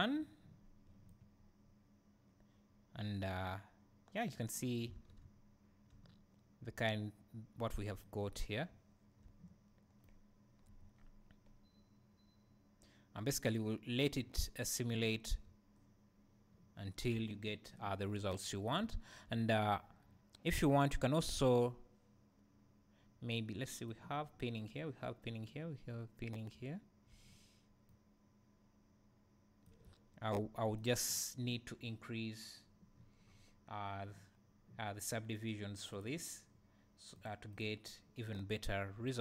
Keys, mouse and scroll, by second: 1.1-31.1 right drag, 5.0 alt+a, 5.3 `, 8.3-8.7 scroll up 2, 8.7 `, 15.2 scroll down 1, 15.4 `, 18.0-18.4 scroll up 1, 18.8 `, 26.5 `, 29.9 `, 31.1-33.0 drag, 33.0-35.9 scroll up 2, 35.9-37.6 drag, 38.9-39.2 scroll down 2.